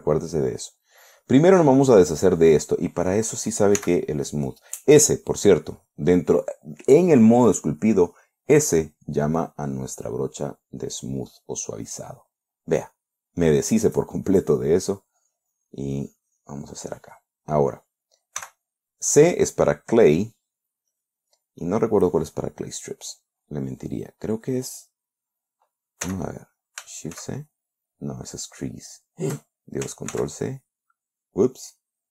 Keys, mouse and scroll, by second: 1.2-1.9 middle drag, 4.2 s, 9.9 click, 11.5-13.1 middle drag, 13.2-14.5 middle drag, 15.4-17.3 drag, 18.8 c, 21.4 click, 22.1 click, 23.5-25.0 drag, 26.5 c, 27.6 shift+c, 30.6 ctrl+c.